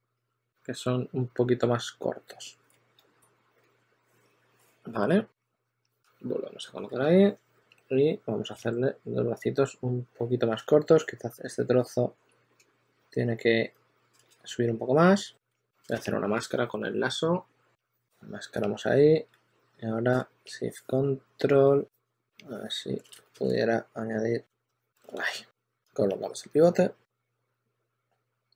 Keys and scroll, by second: 3.5 z, 6.5-8.4 typing, 10.5 shift+super+d, 11.0 shift+super+d, 12.8 shift+super+x, 14.5 w, 15.1 q, 15.8 super+a, 19.2 w, 23.2 super+z, 23.8 q, 25.5 w, 27.4 w.